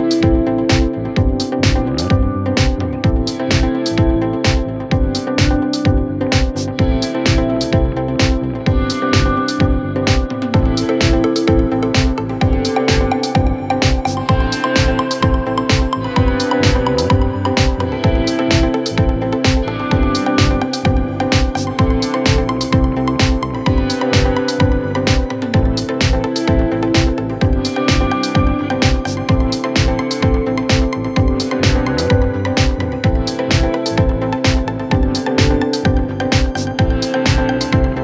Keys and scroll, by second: 1.3 g, 13.4 shift+Page_Down, 17.6 F3, 18.0 Escape.